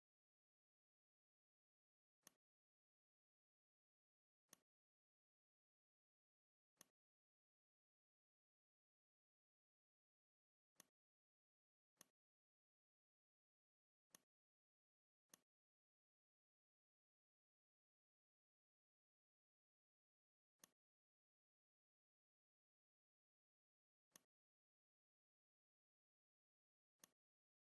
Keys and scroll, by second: 3.4 ctrl+z, 4.1 v, 9.3 shift+x.